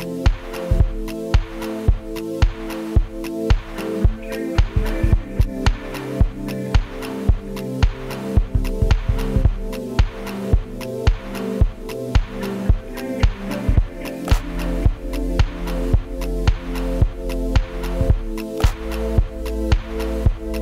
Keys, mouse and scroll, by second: 0.1 scroll down 1, 0.3-0.7 right drag, 1.7 right click, 2.1 Tab, 2.3-2.7 scroll up 2, 2.7 ctrl+r, 3.7 g, 4.4 right click, 4.6 3, 4.7 shift+right click, 5.3 alt+e.